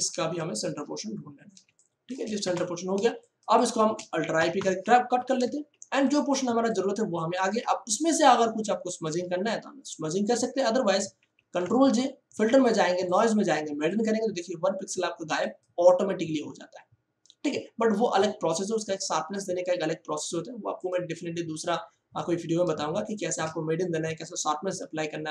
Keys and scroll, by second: 1.6 ctrl+space, 2.4 Return, 2.9 ctrl+space, 3.6 space, 4.3 alt+i, 4.5 alt+p, 5.0 ctrl+d, 11.2 ctrl+j.